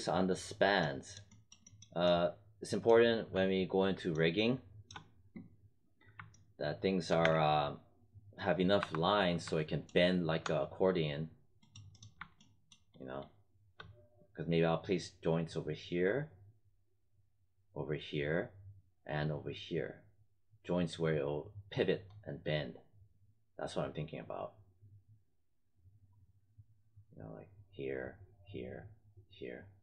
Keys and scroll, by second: 7.1 space, 8.7 5, 10.5 space.